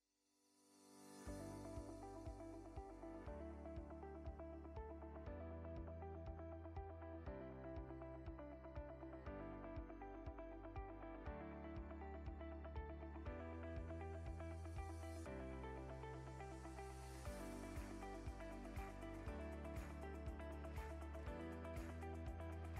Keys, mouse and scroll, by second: 0.9 scroll up 1, 1.5 right click, 1.5 scroll up 2, 2.1 shift+right click, 2.5 shift+right click, 2.9 shift+right click, 3.5 shift+right click, 4.0 shift+right click, 4.5 shift+right click, 4.8 shift+right click, 5.3 shift+right click, 6.0 shift+right click, 6.5 shift+right click, 7.3 shift+right click, 8.7 shift+right click, 9.7 w, 13.1 click, 13.8 click, 14.5-16.0 drag, 17.2 scroll down 1, 17.9-18.6 middle drag, 19.8 click, 20.7 right click, 21.1 scroll down 1, 21.3-21.7 scroll up 2, 21.7 shift+middle click.